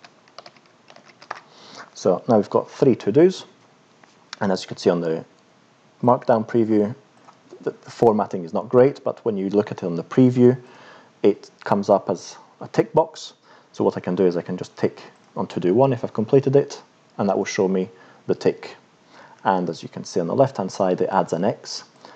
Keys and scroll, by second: 0.0-1.3 typing.